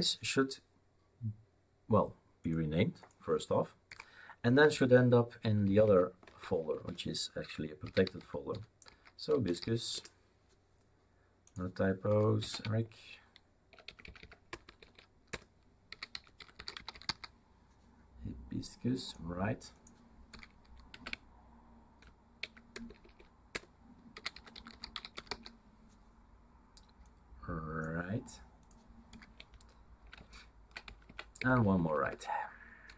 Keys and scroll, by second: 3.9 F2, 4.5 Right, 4.7 Left, 5.2 Left, 5.3-5.8 Left, 6.2-10.0 typing, 12.1 F2, 12.4 Right, 12.6 Left, 13.1 Left, 13.5-14.3 Left, 14.5-17.5 typing, 20.3 F2, 20.9 Right, 21.1 Left, 21.6 Left, 21.7-22.0 Left, 22.4 Left, 22.7-25.7 typing, 29.1 F2, 29.3 Left, 29.8 Left, 29.9 Left, 30.1 Right, 30.6 Right, 30.8 Right, 31.0 Right, 31.3 Delete, 31.5 Delete, 31.7 Delete, 31.8 Delete, 32.0 Delete.